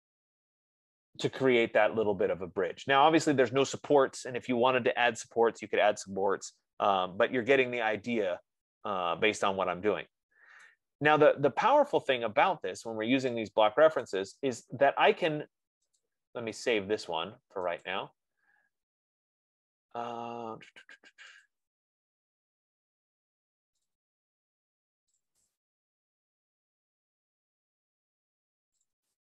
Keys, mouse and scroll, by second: 1.2-2.1 scroll, 2.3 right click, 7.4-8.1 scroll, 11.0 right click, 12.3-12.7 scroll, 13.0-13.6 scroll, 14.5 right click, 16.3 click, 18.4 click, 19.7 F15, 21.9 click, 24.2 click, 24.4 click, 25.5 click, 25.7 click, 29.2 click.